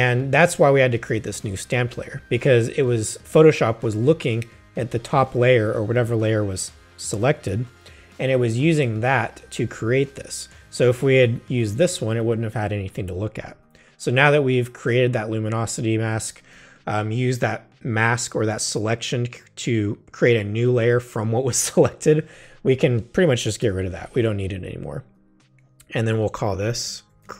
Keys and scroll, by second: 23.6 BackSpace, 26.6-27.3 typing.